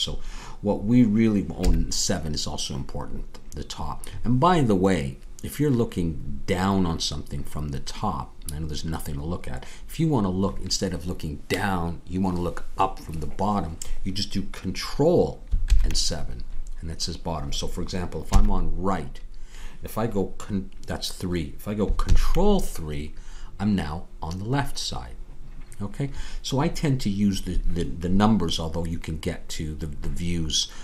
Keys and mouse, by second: 1.6 KP_7, 18.2 ctrl+KP_3, 22.0 ctrl+KP_3.